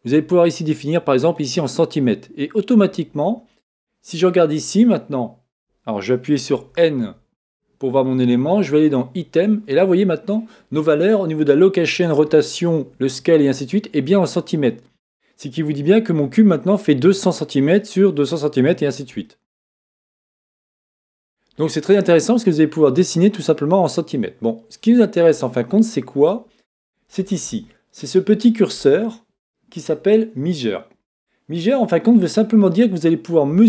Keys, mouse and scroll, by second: 3.8-8.6 middle drag, 8.6 click, 15.4-33.6 middle drag.